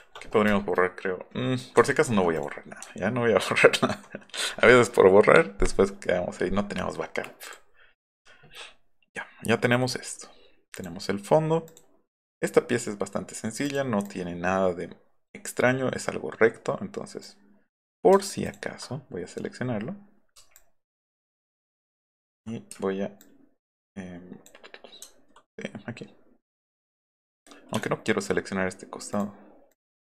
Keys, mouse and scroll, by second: 1.8 alt+middle click, 2.1 alt+middle click, 2.8 alt+middle click, 3.1 alt+middle click, 3.7 alt+middle click, 7.4 click, 7.5 F9, 9.8 click, 10.7 click, 11.6 click, 13.6 click, 14.0-17.2 drag, 17.7 click, 18.4 ctrl+click, 20.6 alt+click, 22.0 alt+click, 23.2-24.5 alt+drag, 27.8 shift+click, 29.1 click, 29.7 click.